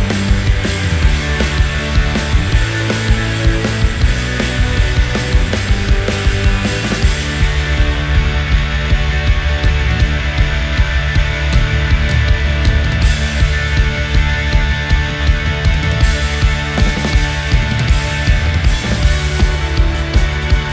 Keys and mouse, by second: 4.2 middle click, 4.9 ctrl+a, 6.8-8.3 middle drag, 9.4 s, 11.2-11.9 drag, 11.2-11.9 middle drag, 11.2-11.9 right drag, 12.3 shift+middle click, 12.7 middle click, 13.4 g, 17.3-18.1 middle drag, 19.4 Tab, 19.5 2, 20.0 click, 20.6-20.7 drag.